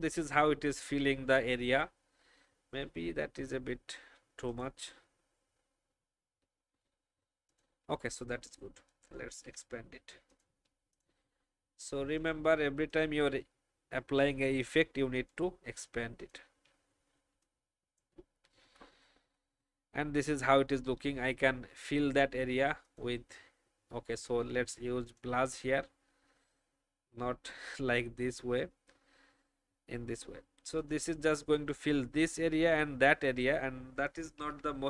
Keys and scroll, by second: 9.3 ctrl+2, 18.6 alt+shift+Up, 18.8 alt+shift+Up, 19.0 alt+shift+Up, 19.2 alt+shift+Up, 34.3 ctrl+2.